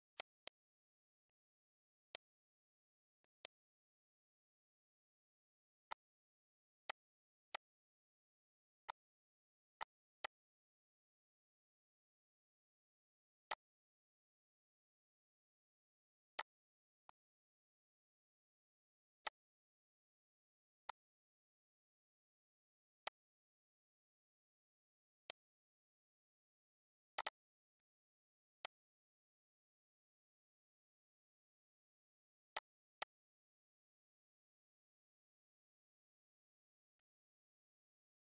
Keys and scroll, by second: 4.9 ctrl+s, 9.4 ctrl+s, 11.7 ctrl+c.